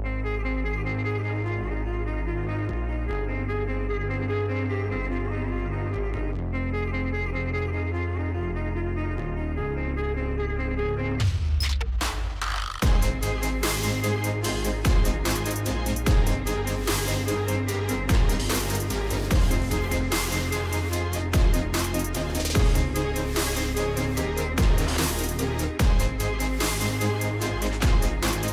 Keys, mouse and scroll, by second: 0.1 space, 1.2-4.5 typing, 6.3 click, 7.4 click, 16.3 click, 17.2 click, 21.1 click, 22.0 click, 22.6 space, 23.7 space, 24.1-24.8 scroll, 24.9 click, 25.8 click, 26.3 space, 27.3 space, 27.6 space, 28.3 space.